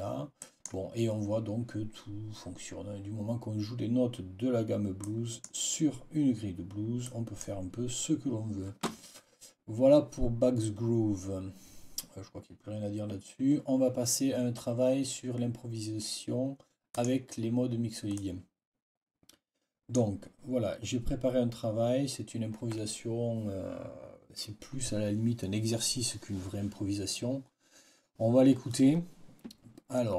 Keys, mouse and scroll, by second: 0.3 click, 4.9 click, 6.9 click, 16.8 click, 18.1 click, 19.3 click.